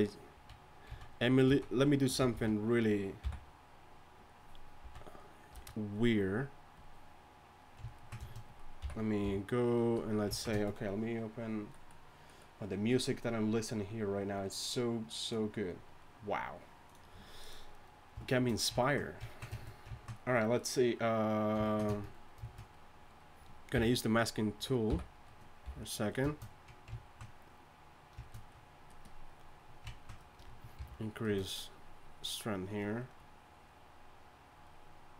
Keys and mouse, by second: 0.3-3.2 typing, 4.8 z, 5.1-5.5 drag, 5.5 a, 8.8 m, 9.2 f, 23.8 m, 24.9 m, 25.6 f, 30.8 shift+f.